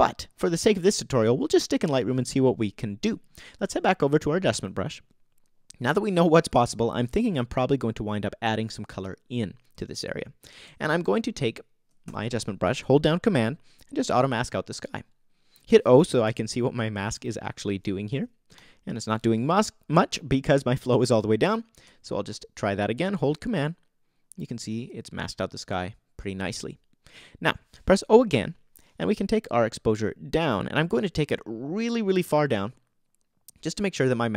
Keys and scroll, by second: 16.2 super+o, 17.1 o, 18.1 o, 28.3 o.